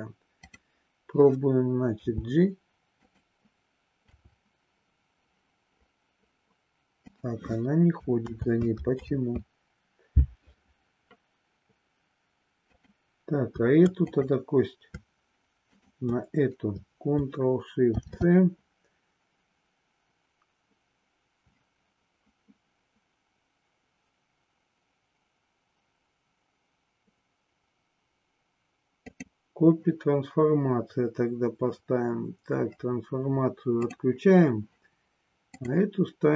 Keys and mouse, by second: 0.3 click, 1.9 g, 3.0 click, 4.0 r, 7.2 click, 8.2 ctrl+z, 12.7 click, 13.9 click, 15.7 shift+click, 35.5-36.3 drag.